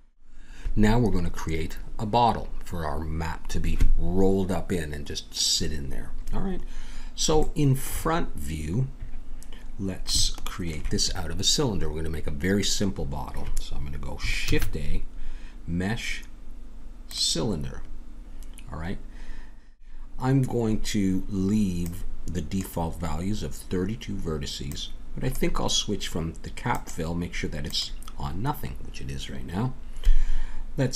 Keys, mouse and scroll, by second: 7.4-12.7 middle drag, 14.5 shift+a, 21.8-26.3 drag, 26.7-28.6 drag.